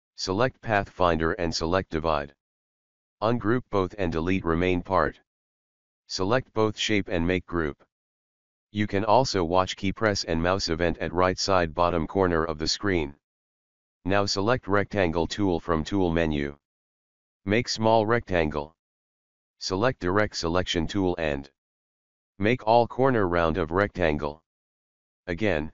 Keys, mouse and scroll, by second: 1.7 click, 4.1 right click, 5.2 click, 9.6 click, 11.2 right click, 12.8 click, 14.4 right click, 15.3-25.7 drag.